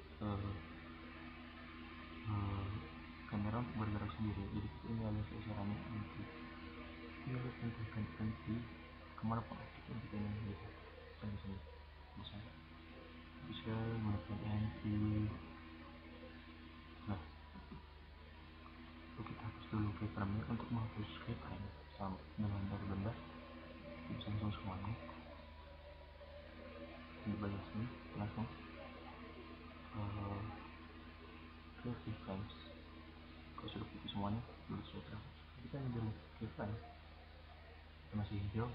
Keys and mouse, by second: 7.9 click, 9.0-9.7 drag, 9.7-10.1 middle drag, 10.1-11.3 drag, 19.1 right click, 23.1-24.6 drag, 24.6 middle click, 32.8 click, 35.9-37.9 drag.